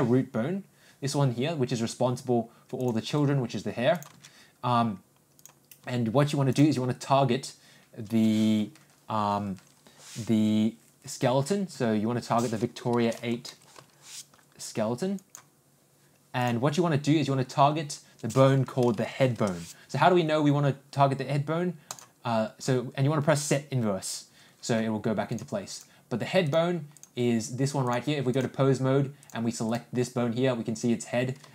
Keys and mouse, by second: 2.8 click, 3.1 g, 6.5-15.5 drag, 16.5-20.0 drag, 21.8 click, 25.2 click, 26.4 click, 27.8 click, 29.7 click.